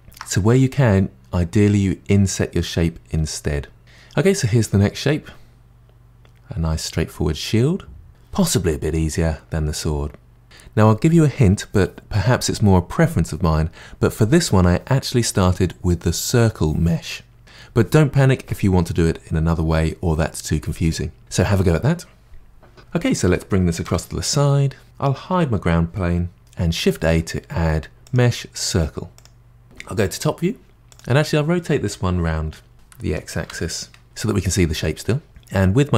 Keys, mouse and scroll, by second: 3.8-6.6 middle drag, 8.8-10.4 middle drag, 22.8 click, 23.2 g, 24.8 click, 26.4 h, 27.0 shift+a, 30.7 scroll down 1, 30.9 click, 35.3 click.